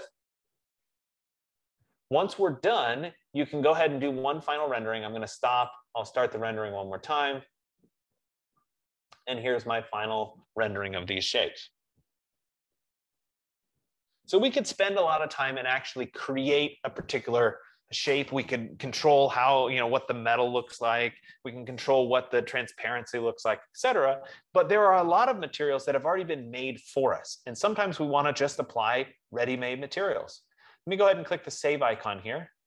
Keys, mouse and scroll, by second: 0.4 middle click, 0.4-1.2 scroll, 1.2-1.9 scroll up 6, 1.9 scroll, 4.9 click, 6.0 click, 32.3 click.